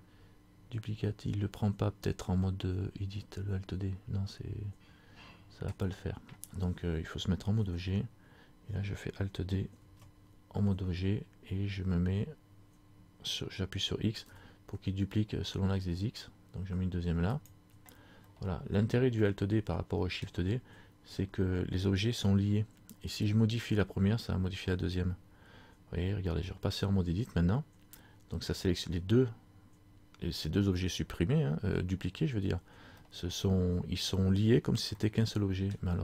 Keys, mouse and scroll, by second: 7.7 Tab, 9.9 alt+d, 18.5 middle click, 20.8 scroll up 2, 21.7 scroll up 1, 27.2 Tab, 33.1 middle click, 35.1 shift+middle click.